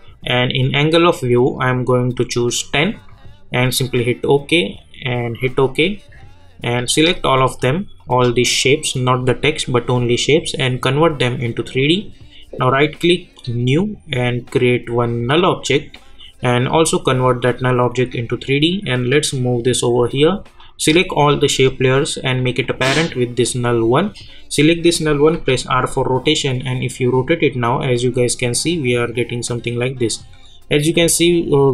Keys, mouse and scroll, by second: 1.5 click, 10.9 click, 12.5 right click, 13.4-24.1 drag, 25.3 r, 26.2-31.7 drag.